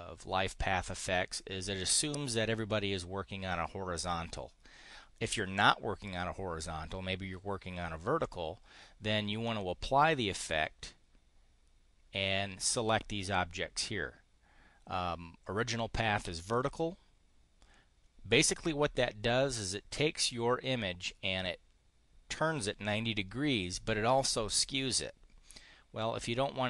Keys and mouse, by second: 8.2 click, 9.4 click, 16.4 click.